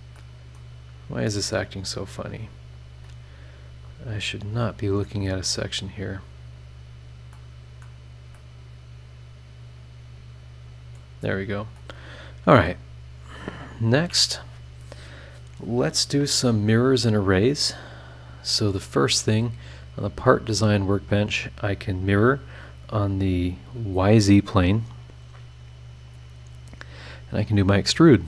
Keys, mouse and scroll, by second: 0.1 middle click, 0.3 click, 0.3 right click, 0.4-1.2 scroll up 4, 0.7 middle click, 1.2 click, 2.2 click, 2.7 click, 3.0 scroll down 2, 3.8 click, 4.4 click, 5.6 click, 6.4-7.1 scroll down 2, 7.3 middle click, 8.0 scroll up 1, 8.3 middle click, 8.4-11.2 drag, 8.4 right click, 11.2 scroll up 1, 11.7 middle click, 11.9 click, 13.4 scroll up 1, 16.7 click, 17.6 scroll down 1, 18.1-18.7 scroll up 4, 20.5 click, 25.1 click, 26.0 click, 27.6 click.